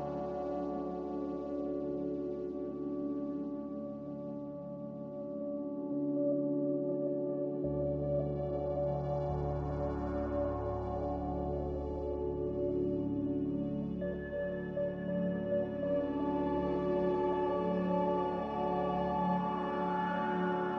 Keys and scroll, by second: 2.0 Escape, 2.2 Escape, 2.5 Escape, 4.8 z, 7.3 typing, 7.5 Return, 13.6 typing, 13.8 Return, 16.2 Escape, 16.5 Escape, 18.9 typing.